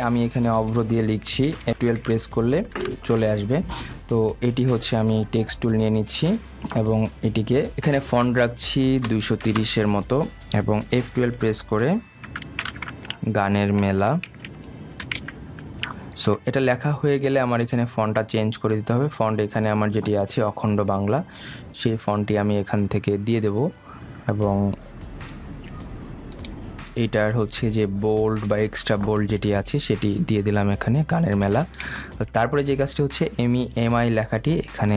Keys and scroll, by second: 2.4 shift+Down, 10.5 Return, 16.1 BackSpace.